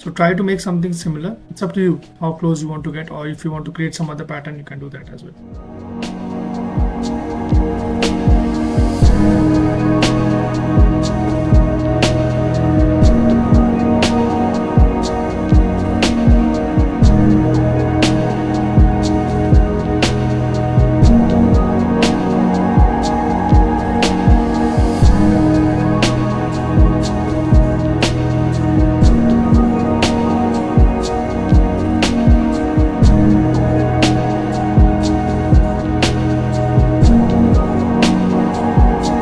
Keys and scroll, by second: 2.7 ctrl+z, 5.5 ctrl+z, 12.9 ctrl+z, 14.2 z, 17.7 ctrl+z, 19.8 ctrl+z, 19.9 ctrl+z, 21.9 ctrl+z, 22.2 ctrl+z, 23.0 ctrl+z, 23.8 ctrl+z, 25.1 ctrl+z, 27.9 ctrl+z, 28.8 z, 29.9 ctrl+z, 33.8 ctrl+z, 35.1 z, 37.9 ctrl+z, 39.1 ctrl+z.